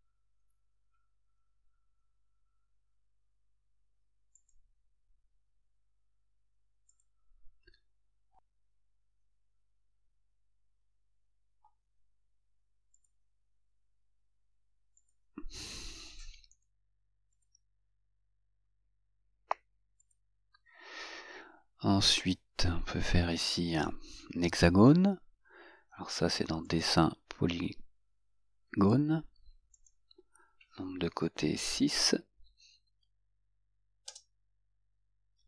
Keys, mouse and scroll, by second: 4.6 click, 7.2 right click, 8.3 right click, 15.2 click, 17.5 click, 20.2 click, 26.8 click, 30.0 click, 34.3 Return.